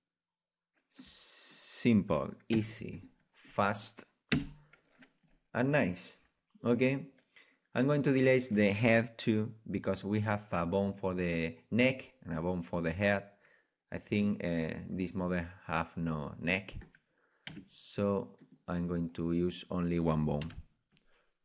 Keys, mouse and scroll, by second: 0.5 right click, 1.7-4.5 middle drag, 2.5 Delete, 4.3 KP_1, 5.5 middle click, 7.9-9.9 right drag, 14.2 middle click, 14.6-17.7 middle drag, 17.4 Delete, 19.0-20.7 middle drag, 20.4 KP_1.